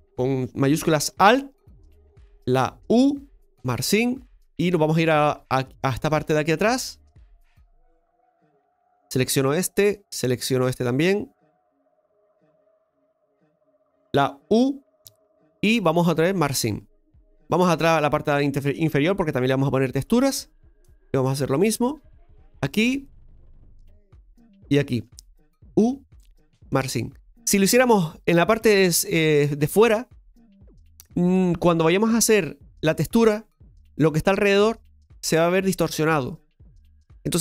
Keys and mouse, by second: 1.2 alt+shift+right click, 3.6 u, 4.3 middle click, 5.5-6.6 middle drag, 7.1 shift+middle click, 8.7 alt+shift+right click, 9.4 shift+middle click, 10.9 alt+shift+right click, 11.7 alt+shift+right click, 12.4 alt+shift+right click, 12.8 alt+shift+right click, 13.3 alt+shift+right click, 16.4 u, 17.2-18.7 middle drag, 19.3 shift+middle click, 21.6 right click, 22.2 alt+shift+right click, 22.4 alt+shift+right click, 23.1 shift+middle click, 24.7 alt+shift+right click, 29.6-32.6 right drag.